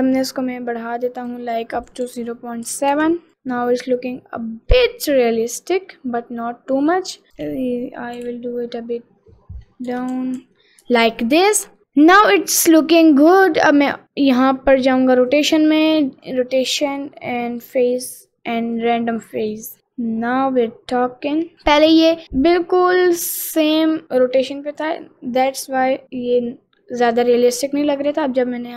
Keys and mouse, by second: 0.0-1.4 drag, 1.8-3.0 drag, 3.3-4.8 middle drag, 5.7 middle click, 6.5 middle click, 7.4 click, 8.2 g, 11.8 middle click, 13.8 click, 15.3 click, 16.3 click, 17.7 click, 18.8 click, 19.8 middle click, 20.7 middle click, 22.1 middle click, 22.6 click, 23.8-26.2 middle drag, 26.4 middle click, 28.2 click.